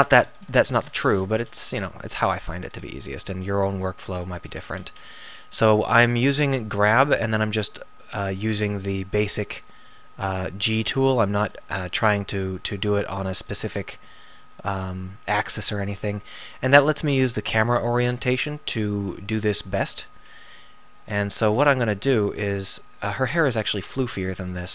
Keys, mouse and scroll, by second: 10.0-10.7 middle drag, 10.7-13.9 drag, 10.7 g, 16.8-19.7 middle drag, 19.7 KP_1, 20.2 KP_3, 23.4-24.7 drag.